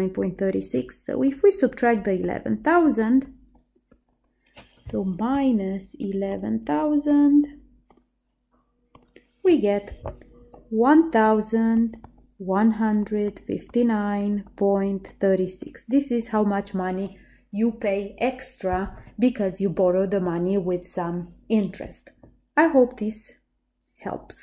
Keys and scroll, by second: 5.9-8.0 typing, 9.0 Return.